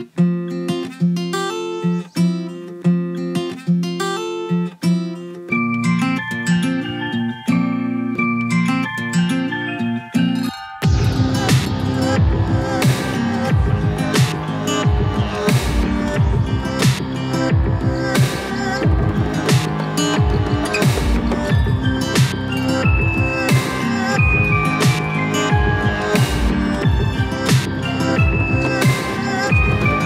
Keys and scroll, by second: 15.7 ctrl+g.